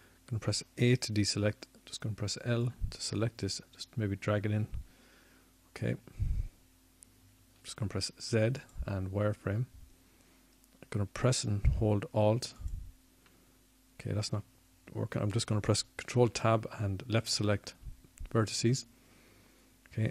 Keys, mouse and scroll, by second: 3.9 KP_1, 5.7 a, 6.4 l, 12.7 z, 13.8 z.